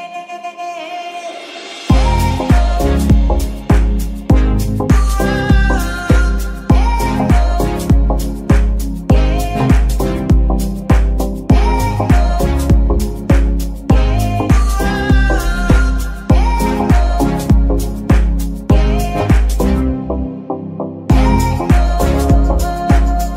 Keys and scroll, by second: 4.9 g, 5.5 Escape, 8.7 g, 9.1 Escape, 12.9 g, 19.4 g, 19.7 Escape, 22.6 g.